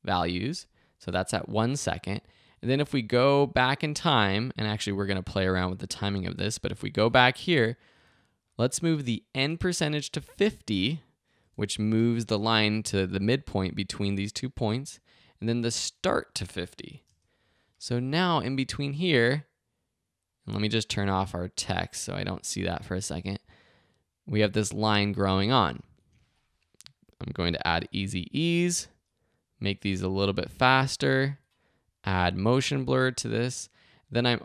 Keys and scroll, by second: 11.2-12.0 typing, 16.6-17.4 typing, 27.8 F9.